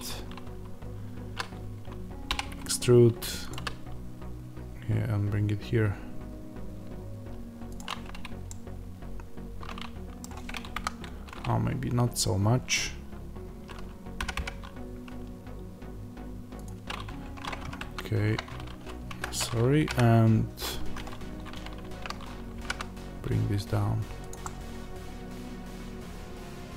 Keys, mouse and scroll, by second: 2.2 e, 3.4 click, 7.7 click, 8.4-16.5 middle drag, 10.7 KP_1, 14.2 g, 16.5 click, 17.0 Tab, 17.5 g, 19.1 Escape, 19.7 g, 20.8 Escape, 21.1-21.7 scroll down 1, 21.7 shift+Tab, 22.1-22.5 scroll up 1, 22.5 g, 24.2 click, 24.3-26.7 middle drag.